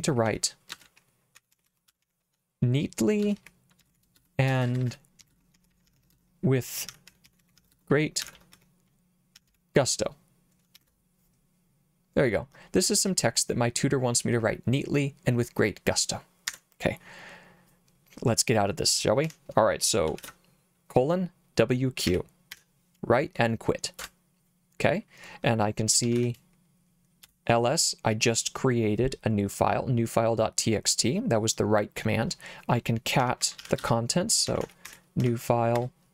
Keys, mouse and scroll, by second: 0.2-10.7 typing, 16.5 Escape, 19.3 Escape, 20.2 shift+;, 22.1 w, 22.5 q, 24.0 Return, 25.8-26.7 typing, 27.2 Return, 32.9-35.8 typing.